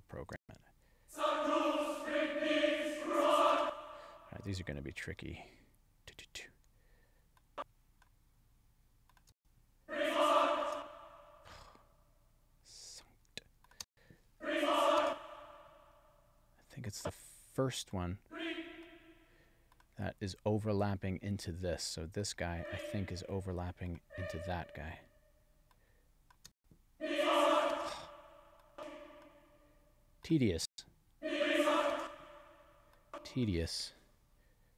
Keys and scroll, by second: 0.4 space, 3.5 space, 9.3 space, 10.7 space, 13.8 space, 15.1 space, 26.5 space, 27.7 space, 30.7 space, 31.9 space.